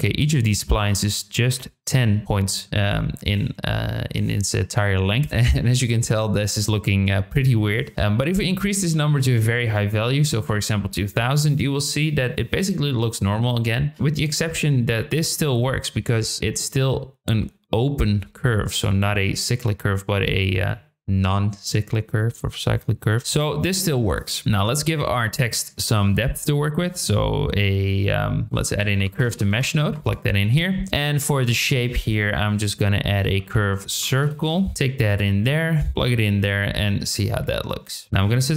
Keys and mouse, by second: 7.4-11.0 drag, 8.8 KP_0, 15.1-23.6 drag, 24.4 shift+middle click, 24.7 click, 25.0 shift+a, 28.4 BackSpace, 30.4 shift+a, 35.8 drag, 37.1-37.8 middle drag, 38.1-38.5 drag.